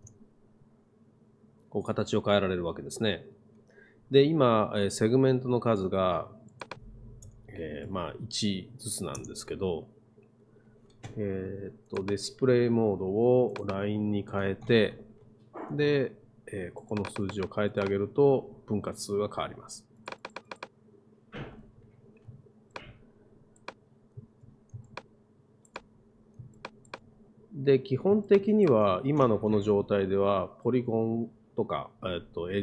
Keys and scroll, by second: 0.0 Return, 7.3 BackSpace, 7.9 i, 9.2 Return.